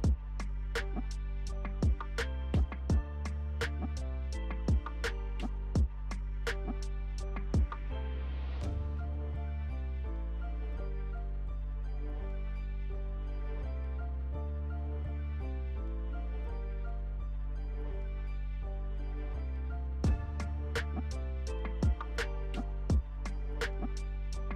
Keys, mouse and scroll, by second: 0.5 alt+right click, 1.5-7.1 alt+drag, 7.1-9.3 alt+right drag, 9.3 alt+click, 11.6 alt+click, 15.4 alt+scroll up 1, 16.4 alt+click, 16.8-17.2 alt+scroll down 1, 17.9 alt+click, 18.3-18.8 alt+scroll down 1, 18.8-19.2 alt+scroll up 1, 20.5 alt+click, 20.9-21.7 alt+scroll down 1, 21.7 alt+scroll up 1, 22.3 alt+click, 23.1 alt+scroll down 1, 23.8-24.3 alt+scroll up 1, 24.3 alt+click.